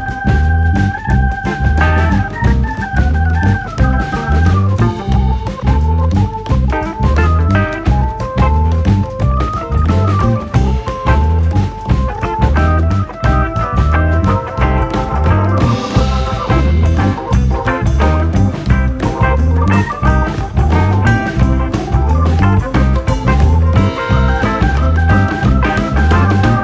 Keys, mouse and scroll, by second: 0.2 click, 1.5 ctrl+right click, 2.2 r, 3.3 g, 4.0 scroll down 2, 4.2 middle click, 5.1 click, 5.9 click, 6.9 KP_1, 8.0 ctrl+right click, 8.6 r, 9.8 g, 10.3 r, 11.0 g, 11.9 ctrl+right click, 12.5 r, 13.5 g, 15.0 ctrl+right click, 15.5 r, 16.5 g, 17.4 KP_7, 18.0 click, 19.4 alt+/, 19.6 click, 21.4 click, 21.8 KP_3, 22.6 click, 23.4 click, 24.0 click, 24.5 KP_7, 25.2 r, 25.8 click, 26.1 scroll down 2, 26.3 middle click.